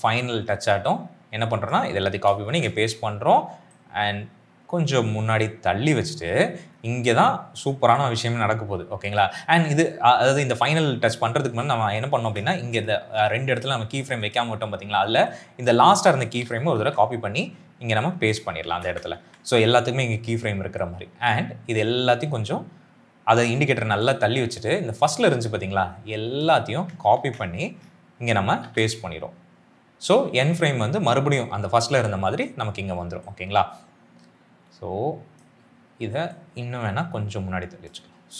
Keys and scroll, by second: 2.1 ctrl+c, 2.4 ctrl+v, 16.3 ctrl+c, 16.7 ctrl+v, 18.6 ctrl+c, 19.1 ctrl+v, 27.2 ctrl+c, 28.5 ctrl+v.